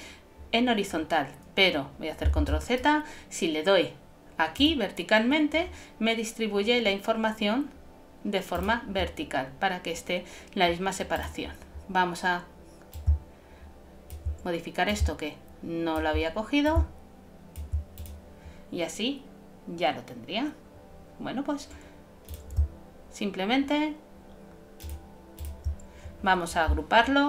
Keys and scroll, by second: 2.4 super+z.